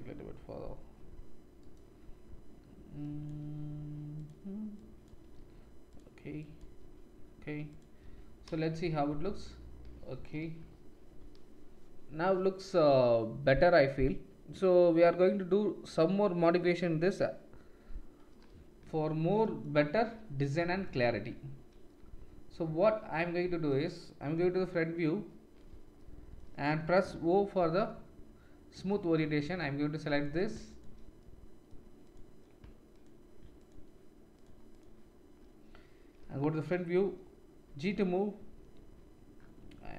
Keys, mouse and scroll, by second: 3.4 g, 4.2 middle click, 4.9 click, 5.2 g, 5.9 middle click, 6.4 click, 6.7 g, 7.8-9.7 middle drag, 8.0 Tab, 8.7 shift+z, 21.1 Tab, 24.4 KP_1, 27.5 o, 30.1 click, 30.7 shift+click, 32.0 click, 32.9 shift+click, 34.7 shift+click, 36.2 KP_1, 37.6 g.